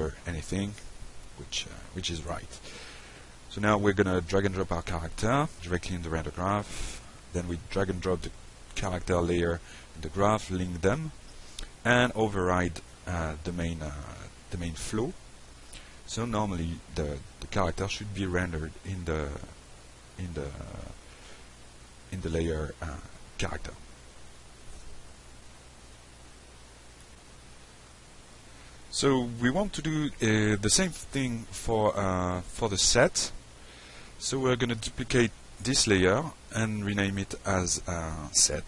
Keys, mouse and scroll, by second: 0.2 click, 3.7 click, 4.2 F5, 7.7-8.4 drag, 8.8 click, 10.1 middle click, 11.2 click, 12.7-13.7 drag, 14.2 alt+middle drag, 15.4-16.0 shift+drag, 16.5-17.2 shift+drag, 17.7 click, 19.3 click, 20.2 click, 23.0-23.5 drag, 25.1 middle click, 26.3 click, 27.1 F5, 33.8 middle click, 35.2 click, 38.4 click.